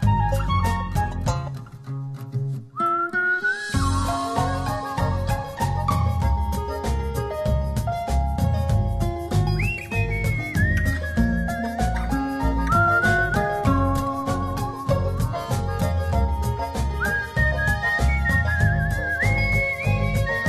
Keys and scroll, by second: 8.0 alt+space, 10.2 space, 17.4 space.